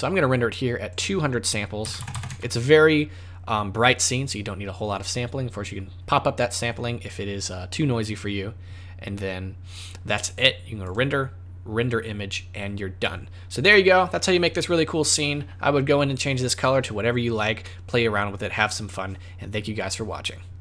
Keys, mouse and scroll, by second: 0.8 click, 2.1 KP_0, 10.8 click.